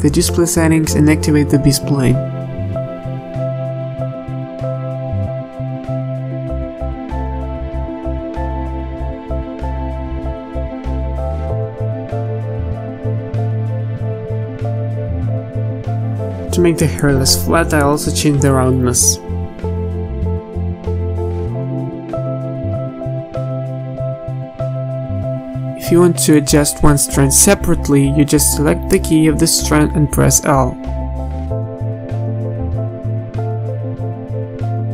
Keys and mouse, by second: 3.2-4.4 drag, 4.4 ctrl+s, 6.4-7.5 middle drag, 7.9 middle drag, 8.2 KP_3, 8.4 z, 9.4 ctrl+z, 10.7 z, 11.9 middle click, 13.7-16.9 drag, 17.6-20.1 drag, 21.6-22.3 middle drag, 22.3 ctrl+s, 22.7-23.1 middle drag, 23.2 z, 23.9-26.1 middle drag, 28.0-31.1 typing, 28.8-29.4 drag, 30.0 middle click, 33.2 z, 33.7 z, 34.3 z.